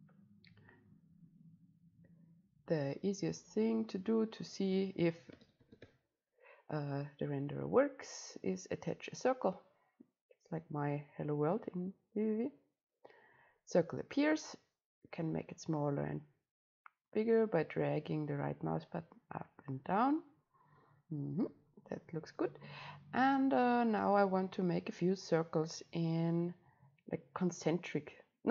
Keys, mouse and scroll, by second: 1.2-2.0 scroll up 1, 2.0-2.5 scroll up 1, 2.5-3.3 scroll up 1, 3.3-6.9 drag, 8.4-13.4 drag, 15.1-23.1 right drag, 23.1 click, 23.6-25.6 drag, 26.3-28.5 right drag.